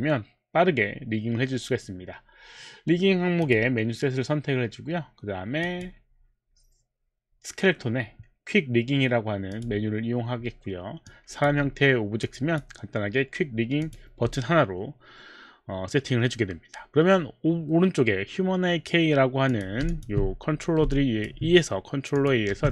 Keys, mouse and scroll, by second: 3.4 click, 5.6 click, 9.5 click, 11.1 click, 12.3 click, 13.8 click, 19.5 click, 22.1 click.